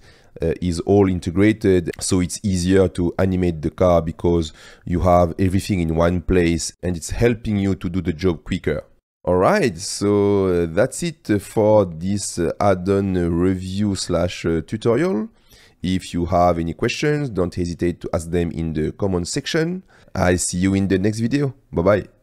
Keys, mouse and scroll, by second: 1.2 click, 3.4 middle click, 6.7 click, 8.4-9.4 drag, 11.3 click, 12.3 shift+drag, 12.5 shift+middle click, 13.3 click, 14.9-15.9 drag, 16.7-17.3 middle drag, 17.7-18.3 middle drag, 18.9-20.0 middle drag, 21.1 middle click, 21.3-22.1 drag.